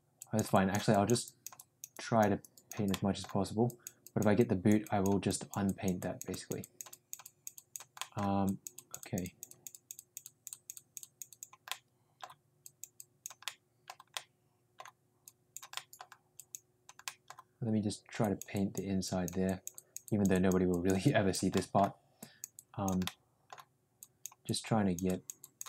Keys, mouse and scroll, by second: 0.1 click, 0.5 click, 0.9 click, 1.2 click, 1.5 click, 1.9 click, 2.4 click, 2.9 middle click, 3.6 click, 4.0 click, 4.4 click, 4.8 click, 5.3 click, 5.6 click, 6.0 click, 6.3 click, 6.6 click, 6.9 click, 7.2 click, 7.5 click, 8.0 middle click, 8.5 click, 8.7 click, 9.4 click, 11.3 click, 11.7 middle click, 12.6 click, 13.0 click, 13.4 middle click, 14.2 middle click, 15.2 click, 15.7 middle click, 16.4 click, 17.0 middle click, 18.1 click, 18.5 click, 19.0 click, 19.5 click, 19.8 click, 20.1 click, 20.3 click, 20.7 click, 21.1 click, 21.6 middle click, 22.2 click, 22.6 click, 23.0 middle click, 23.9 click, 24.4 click, 25.0 click, 25.4 click.